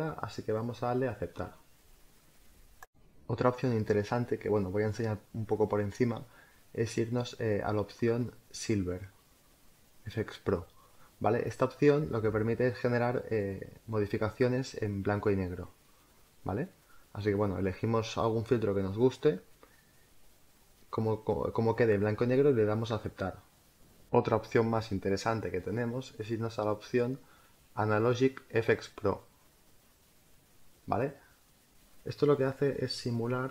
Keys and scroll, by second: 3.8 space, 24.3 space.